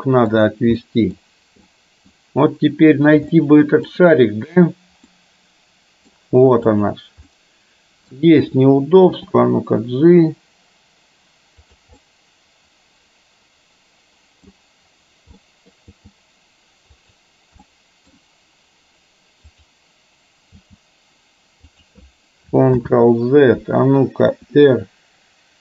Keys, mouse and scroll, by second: 0.9 middle click, 1.8 middle click, 3.4-3.9 shift+middle drag, 5.1-6.1 middle drag, 6.8 click, 7.3-8.2 middle drag, 9.2 g, 12.2-14.6 middle drag, 15.6 middle click, 16.7 g, 17.8-18.2 middle drag, 19.6 click, 20.6 g, 22.8 ctrl+z, 24.4 r.